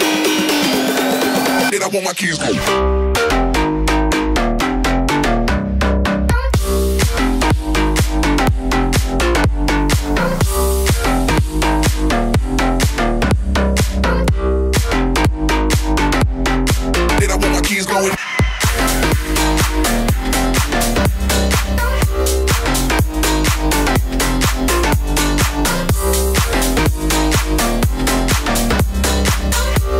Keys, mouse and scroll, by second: 0.6 ctrl+z, 0.7 ctrl+z, 1.0 ctrl+z, 1.7 z, 1.9 c, 3.2 scroll up 1, 3.4-5.8 typing, 4.6 ctrl+n, 7.2 click, 7.3-8.9 typing, 10.4 e, 11.6 click, 12.0 s, 13.6 click, 14.0 middle click, 14.4 right click, 14.7 g, 16.1 right click, 16.3 click, 16.7 click, 17.0 right click, 17.3 click, 17.9 z, 18.2 click, 18.8 z, 19.1 z, 19.3 click, 20.0 ctrl+r, 20.5 ctrl+r, 21.5 g, 22.6 s, 23.2 click, 24.1 ctrl+r, 26.8 ctrl+r, 27.8 click, 28.0 ctrl+r.